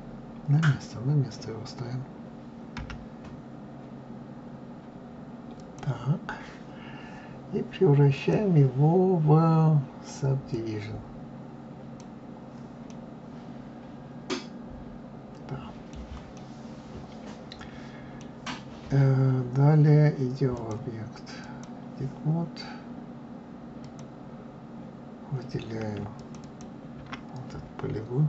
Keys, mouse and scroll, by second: 2.7 g, 8.1-11.1 drag, 12.8-15.8 middle drag, 16.3-18.7 middle drag, 18.7-20.5 scroll up 1, 20.5-23.4 drag, 23.7 click, 26.1 shift+click, 26.3 shift+click.